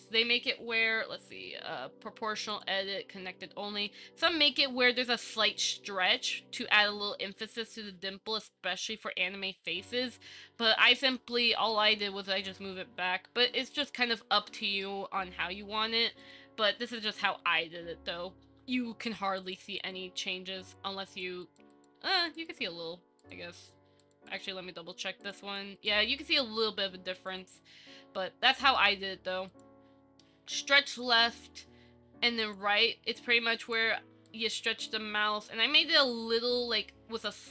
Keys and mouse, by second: 0.1 click, 2.7 click, 10.5 middle click, 11.3 shift+middle click, 11.7 middle click, 14.7 middle click, 15.2 Tab, 15.9 z, 17.5 KP_1, 19.6 click, 21.3 click, 21.9 click, 22.3 click, 23.4 click, 25.4 click, 25.8 click, 26.5 click, 27.5 click, 28.7 shift+middle click, 31.1 click, 32.6 click, 33.8 click, 34.5 click, 36.4-37.5 drag.